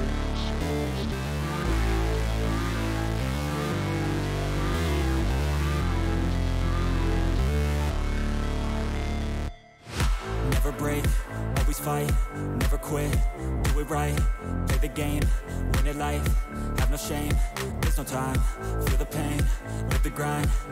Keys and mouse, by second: 0.9 click, 3.4 click, 3.9 click, 5.6 click, 5.7 click, 6.3 alt+shift+click, 6.9 alt+shift+click, 7.3 click, 8.1 alt+shift+click, 8.6 click, 9.2 click, 9.7 click, 11.0 click, 11.9 alt+shift+click, 12.3 click, 12.4-13.7 drag, 14.5 shift+click, 15.3 ctrl+click, 16.6 click, 17.4 click, 20.0-20.7 drag.